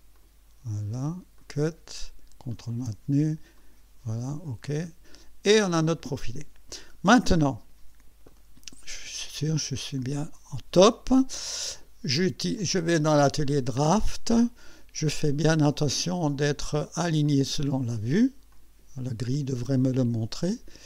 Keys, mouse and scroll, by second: 0.2 click, 1.4 click, 2.5 ctrl+click, 3.6 click, 4.7 click, 6.9-7.2 scroll down 2, 8.3 right click, 10.0 click, 12.6 click, 13.5 click, 15.6 click, 17.2 click, 18.5 click, 19.3 click.